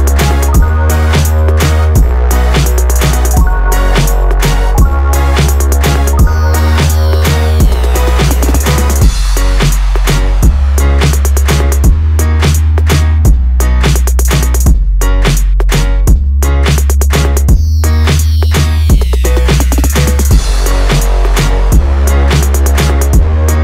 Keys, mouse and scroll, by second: 0.0 click, 1.7 click, 2.9-3.2 scroll up 1, 3.2 Tab, 4.4 shift+d, 8.5 click, 9.3 Tab, 10.2 ctrl+r, 14.7-18.0 drag, 18.0 Tab, 22.1-23.3 drag.